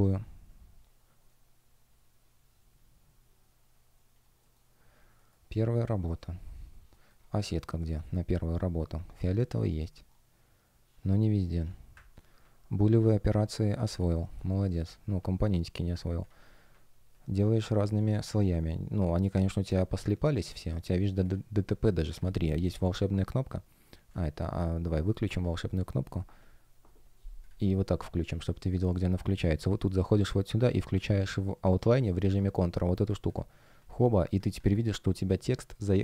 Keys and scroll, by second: 5.1 shift+щ, 5.9 shift+g, 9.1 shift+g, 13.2 space, 14.5 shift+g, 15.2 shift+o, 18.0 shift+g, 18.3 shift+o.